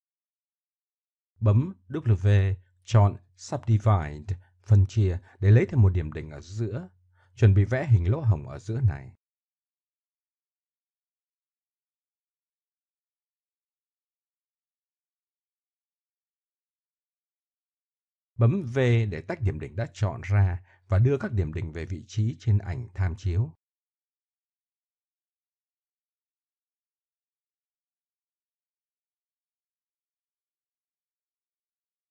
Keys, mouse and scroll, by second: 2.1 middle click, 4.0 middle click, 5.7 click, 5.9 w, 8.2-9.6 middle drag, 9.8-10.3 middle drag, 10.6 middle click, 11.8 KP_7, 12.0-14.1 middle drag, 16.2-17.3 middle drag, 20.0 v, 22.4 drag, 22.6-23.7 middle drag, 23.9 right click, 25.3-25.6 middle drag, 25.9-26.3 middle drag, 27.2-27.7 middle drag, 28.1 middle click, 28.5 f, 29.5 middle click, 30.7 w, 31.5 click, 31.7-32.1 middle drag.